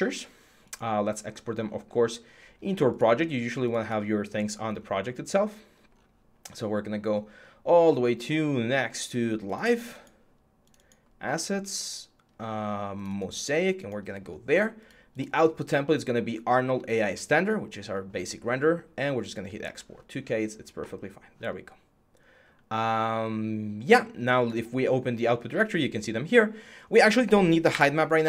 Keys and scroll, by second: 27.5 Delete.